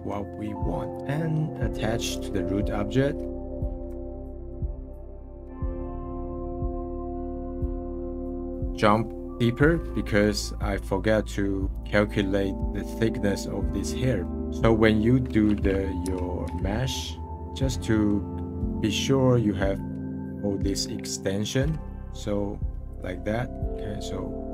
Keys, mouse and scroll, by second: 0.4-1.0 scroll down 8, 1.0 scroll up 10, 1.9-2.5 scroll down 3, 3.3 click, 4.5 ctrl+click, 5.5 ctrl+p, 6.5 scroll down 1, 6.8-8.5 middle drag, 10.0-16.1 middle drag, 16.1 /, 16.5 /, 17.3 h, 17.3-21.2 middle drag, 21.2-21.7 scroll up 5, 22.0 scroll down 1, 22.9-24.5 drag.